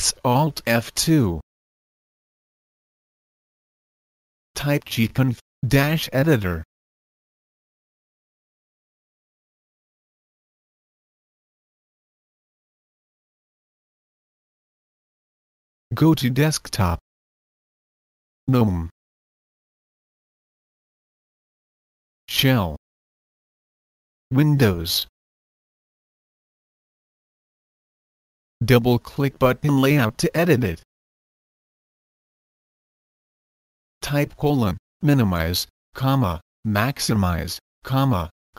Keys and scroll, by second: 4.0-8.3 typing, 33.6-38.5 typing.